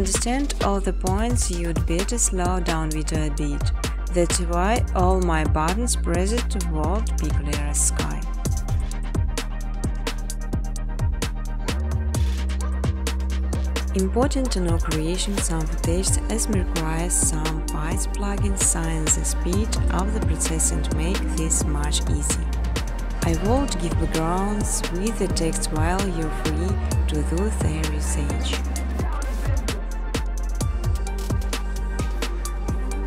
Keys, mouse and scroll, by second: 0.9-4.1 typing, 3.8 click, 5.9-6.6 typing, 6.9 click, 8.1 click, 10.9 click, 11.6-13.2 typing, 14.0 Tab, 14.5 Tab, 14.7 Tab, 14.9 Tab, 15.1 Tab, 15.5 Tab, 16.9-20.4 typing, 21.9 Return, 24.7 click, 26.4 click, 29.2 click, 29.6 click, 30.2 click, 31.3 5, 31.4 5.